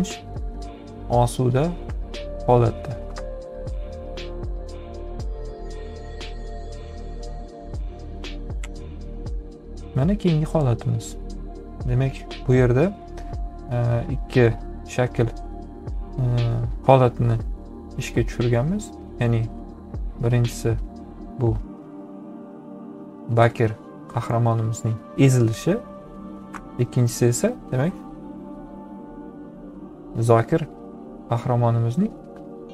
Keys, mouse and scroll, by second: 4.8 ctrl+z, 14.9-16.5 drag, 22.4 ctrl+z, 23.8-25.0 drag, 30.3 ctrl+z.